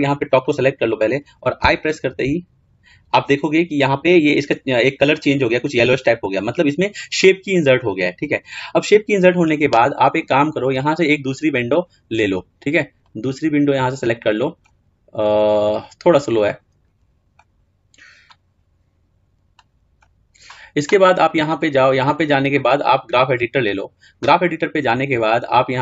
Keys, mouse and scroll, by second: 0.3 click, 10.7-19.2 drag, 19.4-23.9 drag, 25.6-25.8 drag.